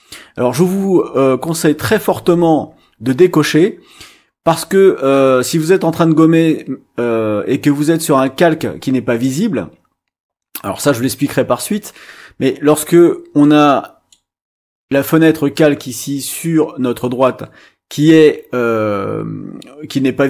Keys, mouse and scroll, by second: 13.4-14.5 drag.